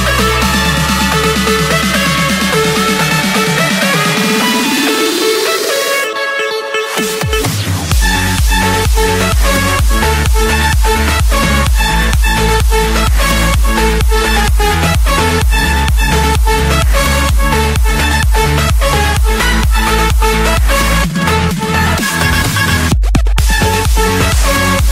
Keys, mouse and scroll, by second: 1.4 click, 1.7 Escape, 3.6-4.8 drag, 5.5 typing, 5.6 Return, 7.0 Escape, 7.2 Escape, 8.6 click, 9.4 right click, 10.7 click, 12.0 click, 13.0 Escape, 14.3-15.3 typing, 16.3 Return, 18.1-19.1 drag, 19.3-20.4 drag, 21.4 click, 22.7 Return, 24.0 Return.